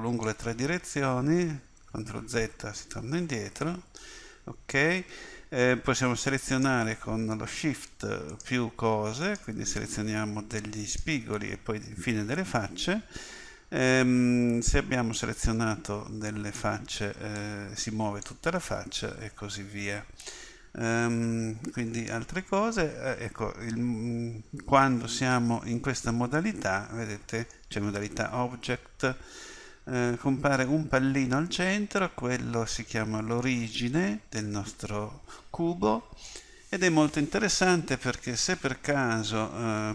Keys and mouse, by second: 2.0 ctrl+z, 3.0 ctrl+z, 3.4 ctrl+z, 18.8 ctrl+z, 19.3 ctrl+z, 24.9 Tab, 33.4-39.9 middle drag.